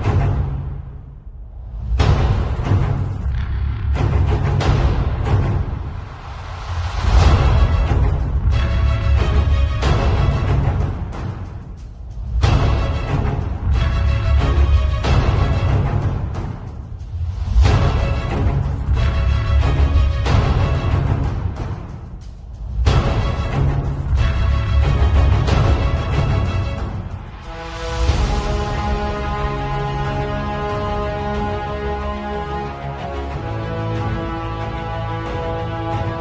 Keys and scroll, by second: 2.0 v, 5.1 super+[, 7.0 super+u, 9.9 Return, 10.3 z, 10.9 v, 12.4 super+t, 16.5 super+[, 18.0 super+t, 21.9 z, 22.5 space, 22.9 v, 24.5 space, 26.7 space.